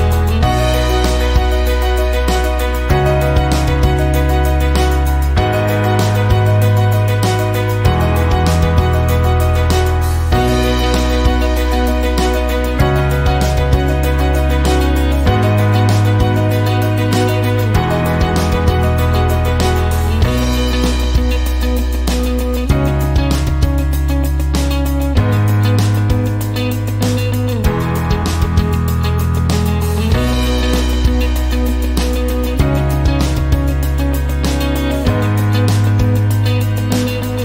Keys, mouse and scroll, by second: 0.2 click, 1.2 click, 2.5 click, 4.2 click, 5.7 KP_0, 6.0 KP_Decimal, 6.4 KP_5, 6.8 KP_Enter, 9.3 click, 10.1 click, 10.6 click, 15.0 click, 16.6 click, 18.2-19.6 drag, 21.7-23.0 drag, 24.4-25.8 drag, 26.8-28.4 drag, 29.7 click, 34.0 click, 34.7 click, 36.4-37.4 typing.